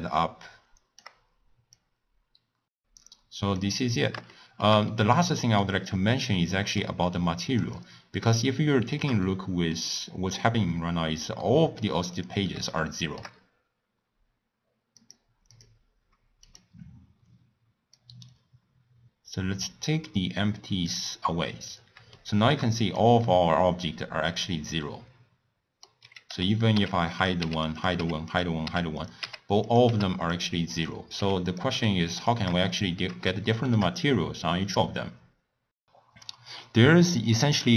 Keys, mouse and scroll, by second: 2.6 g, 4.2 shift+scroll down 1, 4.3-7.8 shift+middle drag, 7.8 click, 8.4-9.9 shift+middle drag, 9.9 scroll up 1, 10.5-10.9 scroll down 1, 10.9-11.4 scroll up 1, 11.4-12.1 middle drag, 12.1 click, 12.8-15.0 shift+middle drag, 15.0 click, 15.5 click, 16.4 click, 17.9-21.0 drag, 21.6 click, 22.1-22.8 shift+middle drag, 22.8 click, 23.2-26.2 middle drag, 26.7-29.8 typing, 27.1 click, 27.8 click, 28.2 click, 29.0 click, 29.6 click, 30.3 click, 30.7 click, 31.1 h, 31.4 click, 31.7 h, 32.1 click, 32.6-35.6 shift+middle drag.